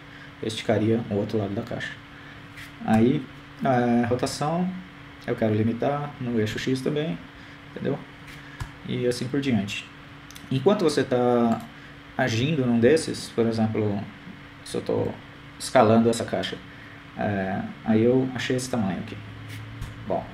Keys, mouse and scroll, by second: 5.5 r, 12.6 right click, 16.2 s.